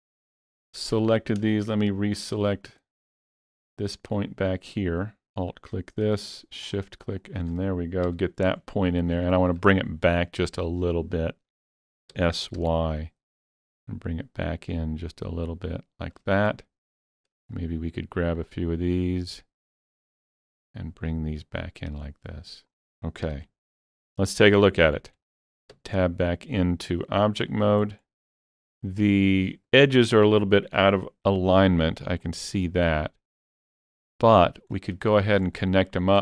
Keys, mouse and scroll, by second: 1.9 shift+double click, 3.6-7.1 middle drag, 5.2 shift+double click, 6.7 shift+click, 7.1 shift+click, 8.1 KP_3, 9.3 shift+middle click, 12.1 s, 12.6 y, 15.5 shift+click, 17.0 shift+click, 18.4 shift+click, 19.9 shift+click, 21.4 shift+click, 23.0 scroll down 3, 23.4 alt+z, 24.0 middle click, 24.6 scroll down 2, 25.7 Tab, 26.0-28.3 middle drag, 28.0 scroll up 1, 28.3 shift+middle click, 29.6 Tab, 30.0-31.3 scroll up 1, 31.3 KP_7, 32.2 click, 33.0-35.1 drag, 34.7 scroll down 1, 35.1 shift+middle click, 35.7-36.2 shift+middle drag.